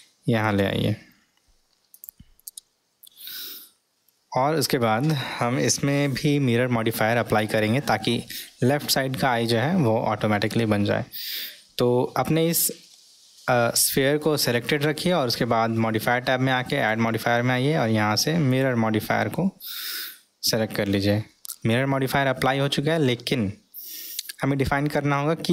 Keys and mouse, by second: 18.6 click.